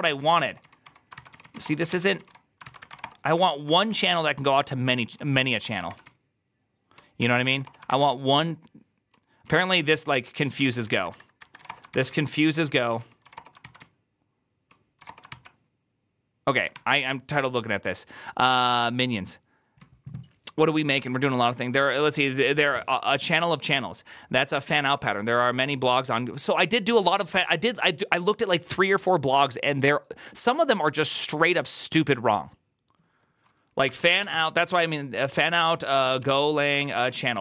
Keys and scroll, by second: 0.0-15.3 typing, 3.5 Return, 34.2 typing, 35.6-37.4 typing.